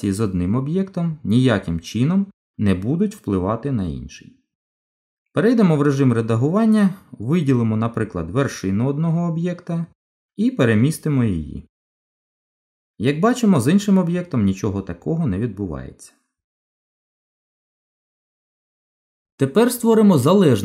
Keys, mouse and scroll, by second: 6.3 Tab, 8.4 click, 9.8 click, 11.2 g, 16.4 ctrl+z, 17.6 ctrl+z, 17.6 Tab, 19.8 click.